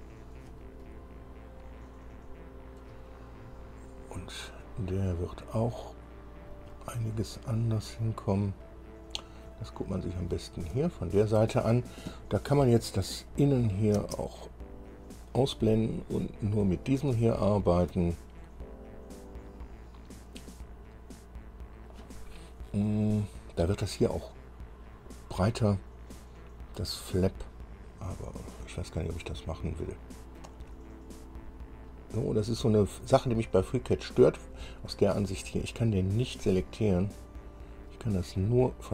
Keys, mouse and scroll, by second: 0.6 scroll down 2, 1.0-3.1 drag, 5.4-10.6 drag, 11.0 shift+click, 13.5 click, 14.2 space, 16.2-16.6 scroll up 2, 17.0 scroll down 2, 17.4 shift+click, 30.0 middle click, 36.2-38.7 middle drag.